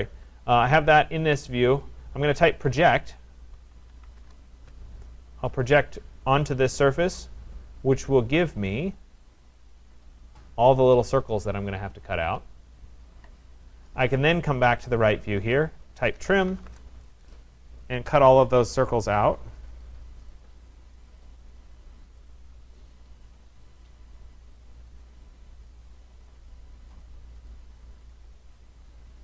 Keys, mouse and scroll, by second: 0.0 scroll, 2.4-4.2 typing, 5.6 click, 6.6 Return, 8.5 click, 8.7 click, 9.5-10.3 scroll, 14.7 click, 14.9 click, 15.5 scroll, 15.9-17.0 typing, 17.7 click, 17.8 middle click, 18.3 click, 18.7 click, 19.8 click, 20.4 click, 21.0 click, 21.5 click, 22.3 click, 22.8 click, 23.6 click, 24.5 click, 25.0 click, 25.8 click, 26.3 click, 27.1 click, 27.6 click, 28.2 click, 28.7 click.